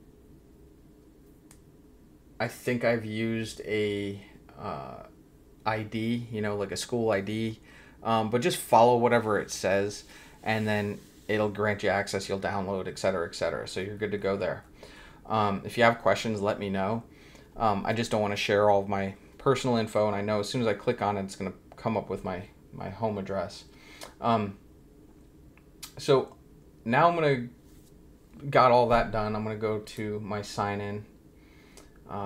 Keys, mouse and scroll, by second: 13.8-15.3 scroll down 1, 29.8 click.